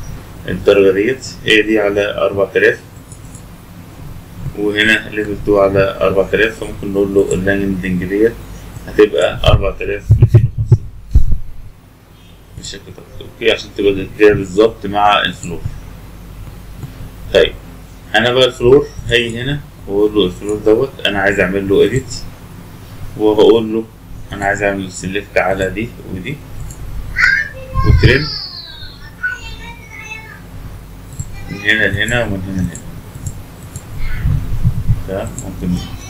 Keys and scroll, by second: 34.4 Escape.